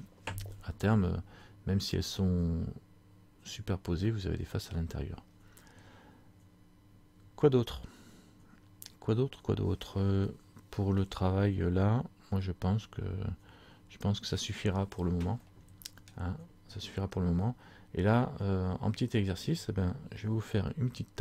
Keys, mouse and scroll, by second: 15.6 middle click, 16.6-17.3 scroll down 3, 17.4-18.3 scroll down 3, 18.3-18.8 scroll down 3.